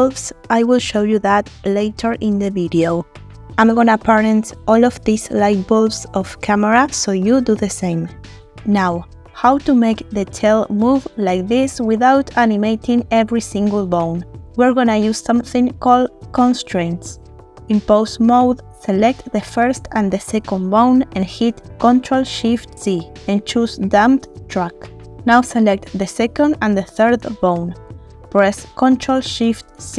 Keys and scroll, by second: 1.1 r, 1.8 Escape, 2.9 r, 8.6 r, 21.3 ctrl+shift+c, 29.6 ctrl+shift+c.